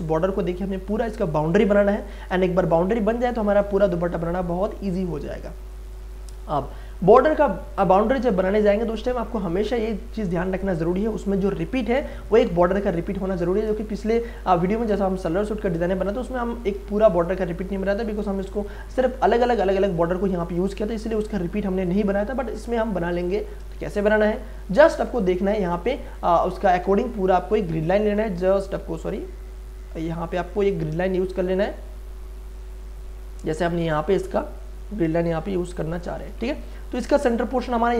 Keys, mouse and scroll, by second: 2.4 space, 2.8-13.7 ctrl+drag, 13.7 ctrl+space, 14.0 ctrl+click, 14.3 ctrl+space, 16.1 click, 16.4 ctrl+space, 23.2 click, 23.2 click, 23.7 ctrl+space, 24.0 ctrl+click, 24.3 ctrl+space, 24.8 ctrl+click, 25.2 ctrl+space, 26.1-36.4 ctrl+drag, 36.4 ctrl+space, 36.6 ctrl+click, 36.9 ctrl+space.